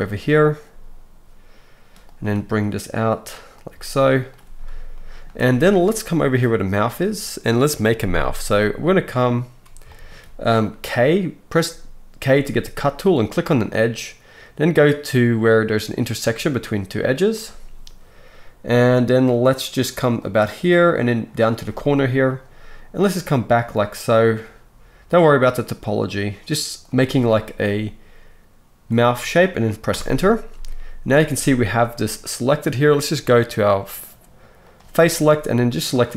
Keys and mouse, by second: 1.3 click, 1.7-11.7 right drag, 2.3 g, 3.5 click, 3.5 middle click, 3.7 g, 11.7 middle click, 12.3-34.7 right drag, 12.3 k, 34.7-36.0 middle drag.